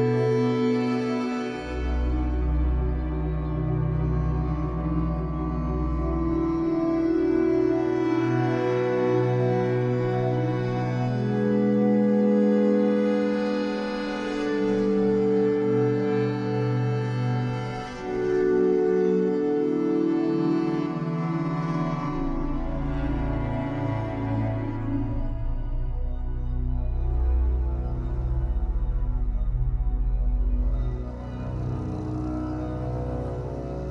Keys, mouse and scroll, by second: 2.3-3.4 scroll up 1, 4.8 ctrl+z, 14.6-15.4 scroll up 1, 15.6-33.9 drag, 16.5 ctrl+z, 23.0 ctrl+z, 27.6 ctrl+z, 32.7 ctrl+z.